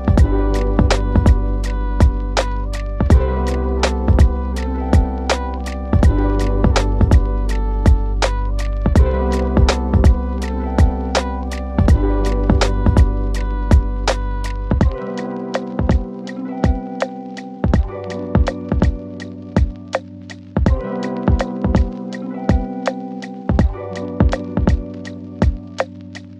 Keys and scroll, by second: 2.8 ctrl+k, 15.6 shift+Page_Up, 19.6 ctrl+Page_Down, 26.2 shift+Page_Up.